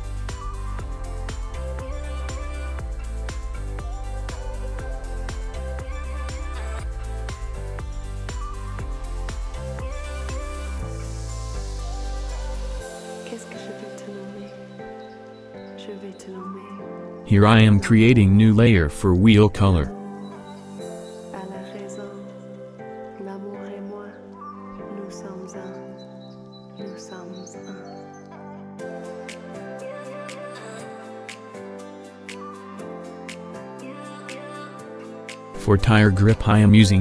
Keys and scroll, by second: 7.4 v, 18.4-20.6 typing, 26.1 ctrl+c, 26.4 ctrl+f, 36.4 v.